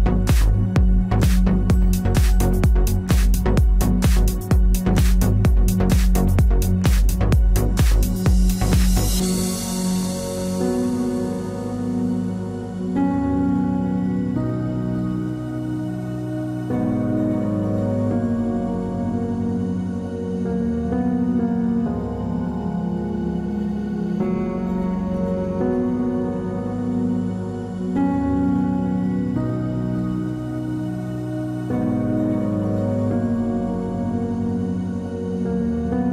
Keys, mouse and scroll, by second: 1.0 c, 5.8 z, 6.2-7.9 right drag, 7.9-10.0 middle drag, 10.0-11.7 drag, 11.1 KP_3, 12.4 ctrl+s, 13.0 n, 14.2-15.7 drag, 15.1 n, 15.7 Tab, 16.1 z, 20.7 Tab, 23.4 ctrl+Tab, 26.9-32.5 middle drag, 33.2 ctrl+Tab.